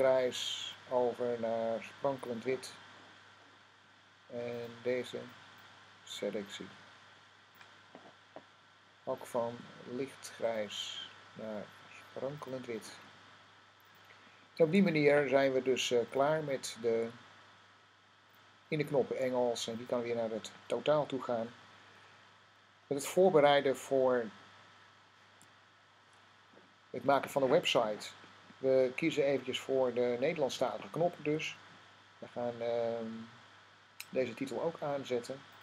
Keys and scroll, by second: 23.0 -, 25.2 0.